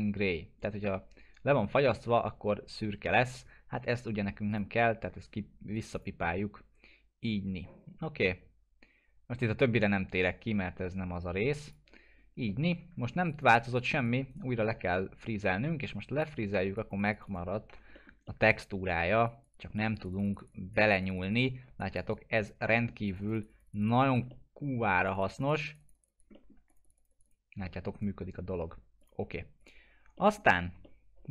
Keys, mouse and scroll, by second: 11.6 click, 12.5 middle click, 12.8-13.2 scroll down 1, 13.2 click, 14.3 right click, 16.2 click, 17.7 F4, 18.0 middle click, 18.3-19.2 alt+middle click, 19.3 click, 22.7 alt+middle click, 23.1 click, 24.3-24.9 alt+middle click, 25.0 click, 26.3 alt+middle click, 26.7 click, 27.6 alt+middle click, 27.9 right click, 29.0 click, 30.2 middle click, 30.5 scroll down 1, 30.8-31.3 alt+middle drag.